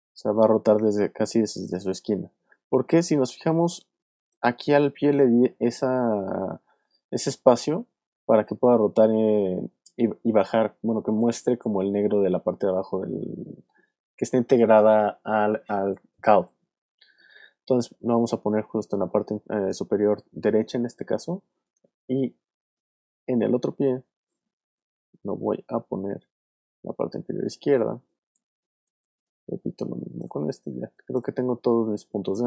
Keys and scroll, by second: 2.4 w, 17.6 super+z, 18.7 super+space, 23.4 super+z, 24.5 super+y, 27.3 space, 29.8 space, 30.3 alt+space, 32.0 alt+space.